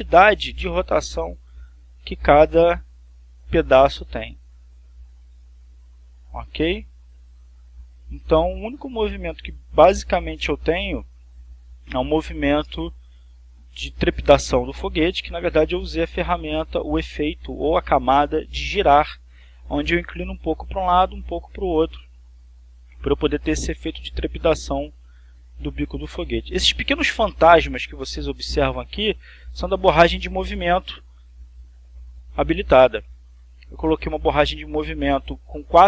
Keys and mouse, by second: 2.4-14.9 drag, 20.6-24.0 drag, 24.2 click, 26.5 click, 30.0 click, 32.5 click, 33.4 click.